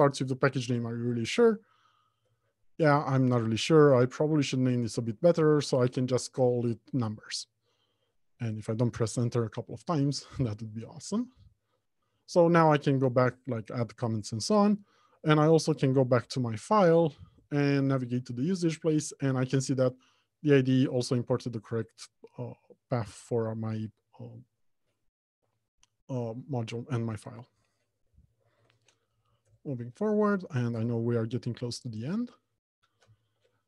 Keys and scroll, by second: 9.6 ctrl+z, 12.5 alt+Return, 16.4 ctrl+b, 29.0 alt+Home, 29.2 Left, 29.6 Return.